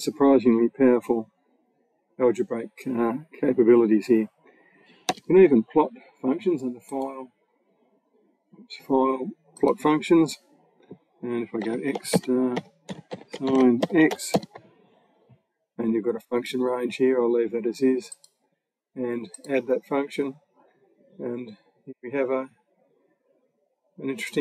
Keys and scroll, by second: 4.9 BackSpace, 11.5-14.2 typing.